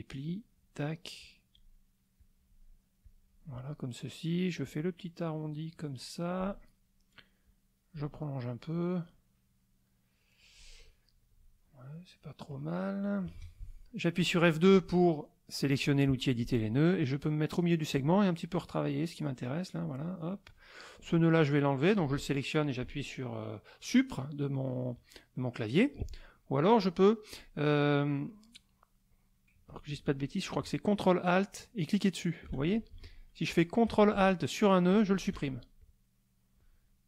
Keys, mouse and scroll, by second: 0.2 click, 1.2 click, 2.2 click, 3.0 click, 4.6-6.6 drag, 7.4 click, 8.2 middle click, 9.0-10.3 middle drag, 11.2 middle click, 12.3 middle click, 13.3 F2, 15.6 click, 17.0-18.1 drag, 19.2 click, 20.4 click, 21.9 click, 31.3 ctrl+alt+click, 32.9 ctrl+alt+z, 34.9 ctrl+alt+click, 35.8-37.0 drag.